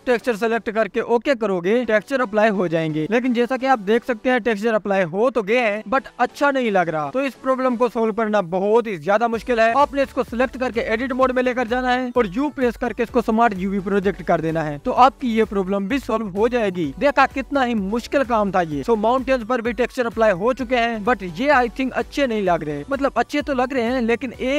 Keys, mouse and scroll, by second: 3.1 KP_0, 5.0 KP_Decimal, 5.5-7.4 scroll up 3, 7.4-8.3 drag, 8.3-9.4 scroll down 2, 10.9-11.7 drag, 11.7 Tab, 15.1 Tab, 16.6 KP_0, 22.9-24.5 drag.